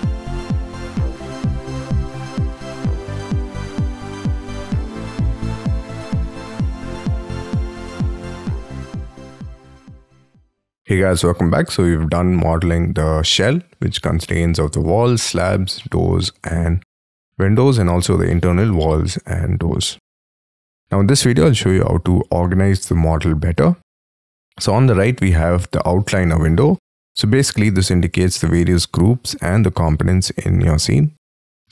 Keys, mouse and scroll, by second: 0.0 scroll up 3, 0.2 m, 0.6 shift+click, 0.8 space, 0.8-1.4 scroll down 25, 1.0 y, 1.4 shift+middle click, 2.5 middle click, 2.8 scroll up 1, 2.8 middle click, 3.1 middle click, 3.2 middle click, 3.4 shift+middle click, 3.5 shift+middle click, 4.6 double click, 7.3 double click, 7.5 middle click, 7.8 scroll down 5, 8.0 Escape, 8.1 middle click, 8.3 middle click, 9.0 middle click, 10.0 middle click, 10.2 middle click, 10.3 middle click, 10.4 middle click, 10.8 middle click, 14.2 middle click, 15.2 middle click, 15.9 middle click, 16.4 middle click, 16.9 middle click, 17.2-17.6 scroll down 6, 17.6-18.1 scroll up 12, 18.3 middle click, 18.8 scroll down 7, 19.4 scroll up 5, 19.8 scroll down 2, 21.1-26.8 scroll up 8, 27.9-28.6 scroll down 11, 29.5-31.6 scroll down 4, 31.6-31.7 scroll up 4.